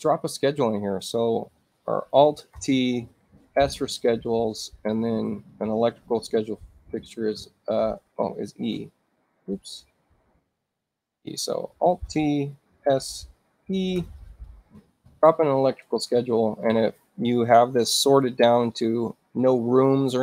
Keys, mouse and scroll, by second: 2.5 t, 3.6 s, 8.7 Escape, 10.2 space, 12.0 t, 12.8 s, 14.0 e, 15.1 click, 16.0 space.